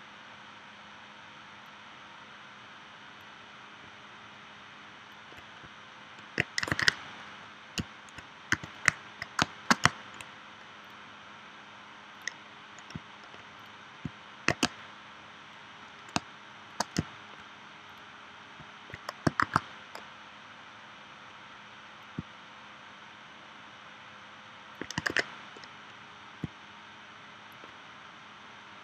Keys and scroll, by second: 6.7 super+s, 8.5 v, 9.4 space, 14.7 space, 16.2 space, 19.4 shift+w, 25.1 super+z.